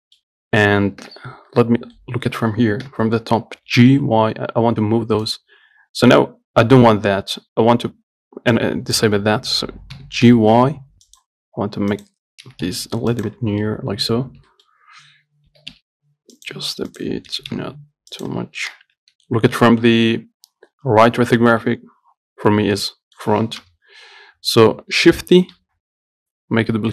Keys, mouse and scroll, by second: 1.3 KP_7, 2.2 middle click, 3.1 KP_7, 3.9 g, 8.8 click, 10.2 g, 12.2 click, 12.7 g, 13.7 scroll down 1, 13.9 middle click, 14.5 scroll up 1, 14.7-15.7 shift+middle drag, 15.7 g, 17.1 click, 17.6 g, 19.0 KP_1, 23.0 middle click, 23.9 KP_3, 25.8 shift+d.